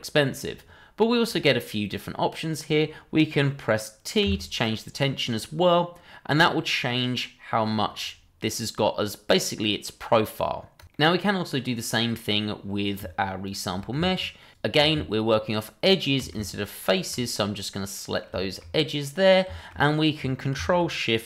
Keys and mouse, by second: 4.2 t, 10.9-12.0 middle drag, 13.4 shift+click, 15.8 shift+click, 16.9 ctrl+click, 17.3-18.2 middle drag, 18.4 shift+middle drag, 19.0-19.3 middle drag, 19.5 shift+middle click.